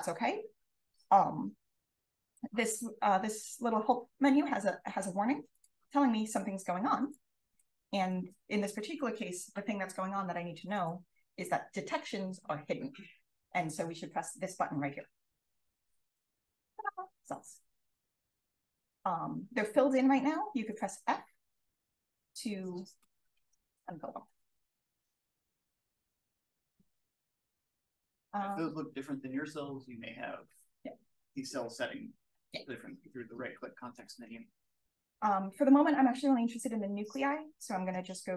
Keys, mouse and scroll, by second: 5.5 click, 16.0 click, 18.2-19.0 drag, 21.3-23.8 typing, 26.9 click, 27.7-29.2 scroll up 2, 33.4-33.8 drag, 34.2-35.0 right drag, 35.0 click, 37.0-38.3 right drag.